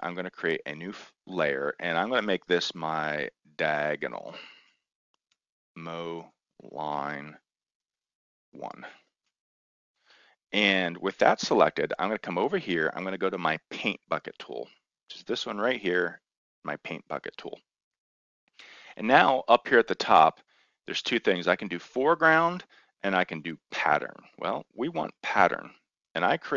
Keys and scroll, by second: 2.9-10.0 typing.